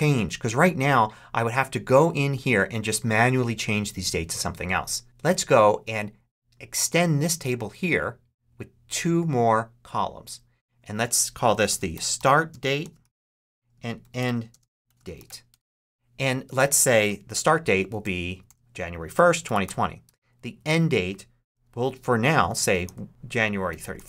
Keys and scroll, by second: 11.1-15.6 typing, 17.5-19.9 typing, 19.9 Tab, 22.3-24.0 typing.